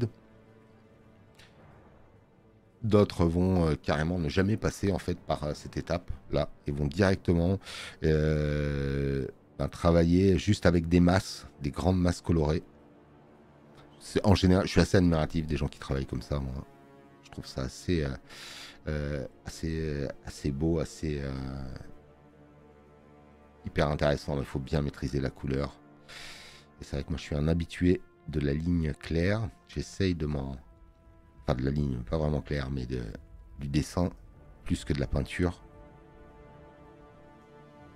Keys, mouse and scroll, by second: 5.1 space, 5.3 click, 14.3 space, 14.5 click, 30.3 click, 30.3 space.